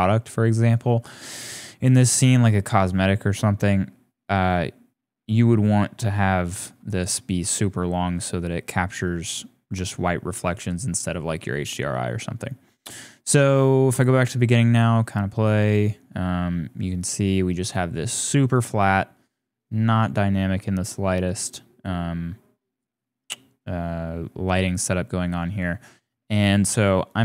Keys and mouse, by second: 1.8 shift+middle click, 2.9 middle click, 3.5 middle click, 4.1-5.3 middle drag, 7.3 click, 11.3 middle click, 12.4 shift+middle click, 14.0-17.5 middle drag, 18.5 click, 21.8-22.8 drag, 24.6 click, 27.1 click.